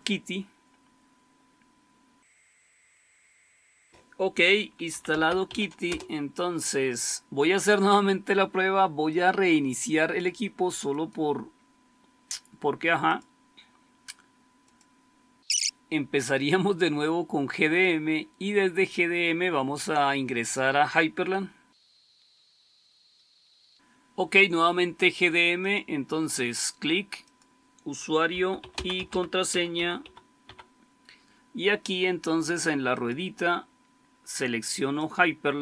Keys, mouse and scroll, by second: 4.6-5.9 typing, 9.0-28.2 drag, 28.0-30.9 typing.